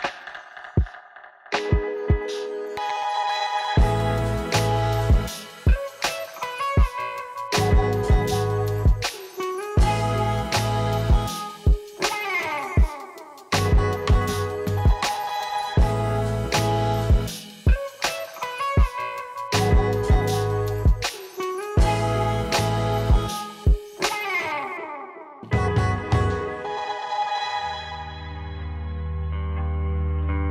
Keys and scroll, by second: 0.0 u.